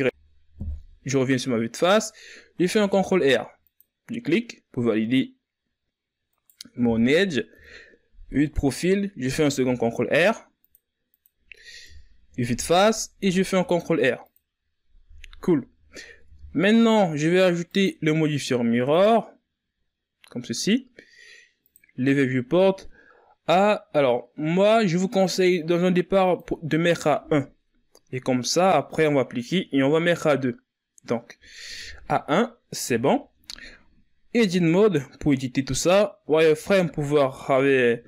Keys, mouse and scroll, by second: 0.4 KP_1, 2.3 ctrl+r, 7.3 KP_3, 9.0 ctrl+r, 11.6 KP_1, 12.9 ctrl+r, 16.0 Tab, 17.4-20.5 drag, 21.4-24.5 drag, 26.0-31.5 drag, 31.5 KP_3, 32.6 KP_1, 34.1 Tab, 36.0 z.